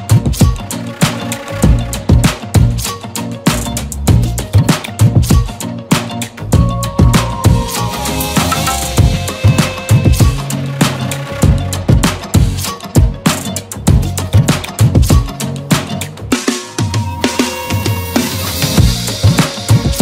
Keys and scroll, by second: 2.2 space, 3.6 e, 4.1 b, 6.4 space, 15.6 space, 16.4 ctrl+z, 17.2 ctrl+z, 19.9 ctrl+z.